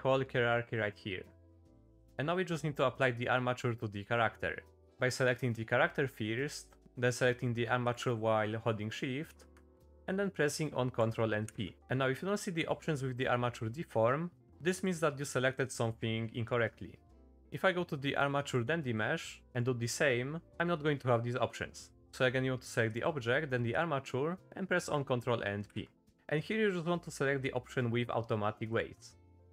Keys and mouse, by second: 2.1 middle click, 5.1 click, 7.8 shift+click, 9.8 middle click, 11.4 ctrl+p, 16.4 click, 19.4 ctrl+p, 25.7 ctrl+p.